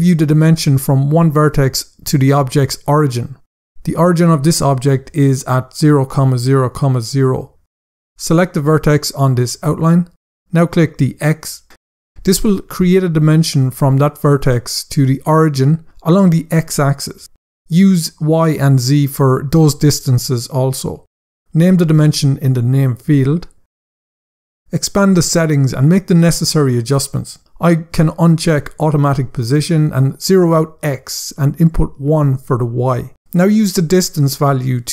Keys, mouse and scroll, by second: 8.2 click, 10.6 click, 20.5 scroll down 1, 21.7 click, 22.3-23.3 typing, 23.6 Return, 25.2 click, 28.0 click, 28.9 click, 29.5 typing, 30.0 Tab, 31.2 Tab, 31.9 typing, 32.4 Return, 34.2 click.